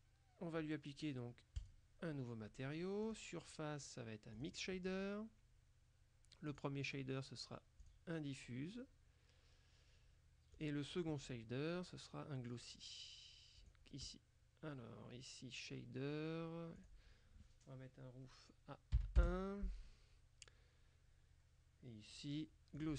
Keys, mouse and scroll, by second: 1.6 click, 3.1 click, 4.4 click, 6.6 click, 7.9 click, 10.6 click, 13.6 click, 16.8 click, 19.0 KP_1, 19.3 KP_Enter, 22.8 click.